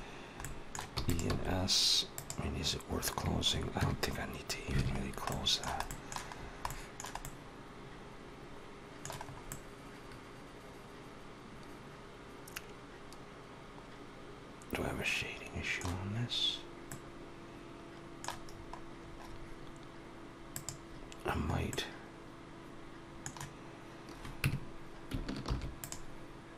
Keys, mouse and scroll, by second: 0.3 middle click, 0.7 e, 1.1 s, 3.6 Tab, 4.8 alt+a, 4.8 scroll down 3, 5.1 middle click, 5.7 middle click, 6.2 scroll down 2, 6.5 middle click, 7.0 middle click, 9.1-10.1 scroll up 2, 10.1 middle click, 16.7 middle click, 18.3-19.2 scroll up 5, 20.4 click, 21.5 middle click, 24.2 Tab, 25.2 ctrl+r.